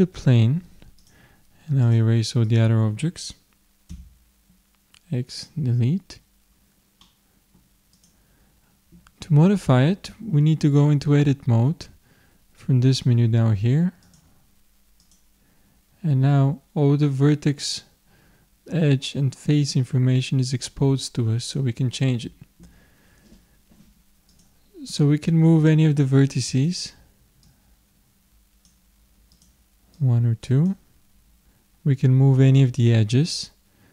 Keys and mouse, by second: 1.0-4.4 drag, 3.9 x, 6.1-8.0 middle drag, 8.0-9.8 drag, 14.1 click, 15.1 click, 24.3-26.3 drag, 26.6-29.0 drag, 29.4-31.6 drag.